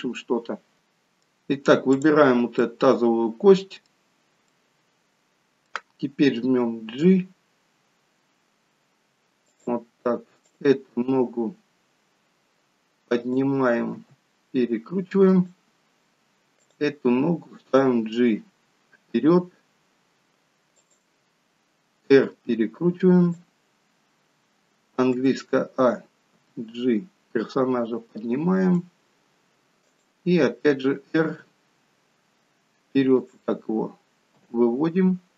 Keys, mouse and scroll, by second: 0.8 middle click, 0.8-1.9 scroll up 2, 1.9 click, 2.7 middle click, 4.0-4.5 scroll down 1, 4.5 middle click, 6.6 g, 10.4 click, 11.0 g, 14.0 r, 16.6 click, 17.8 g, 22.0 r, 25.1 a, 26.4 g, 30.0 click, 31.3 r, 34.4 g.